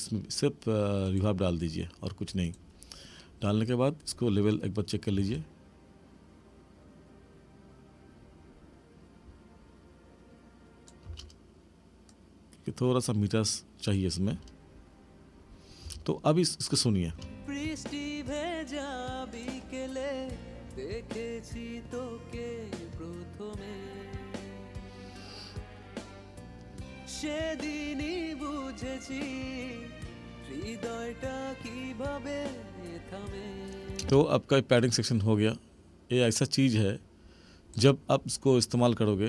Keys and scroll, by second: 5.1 space, 11.1 space, 14.2 space, 15.8 space, 17.1 space, 34.0 space.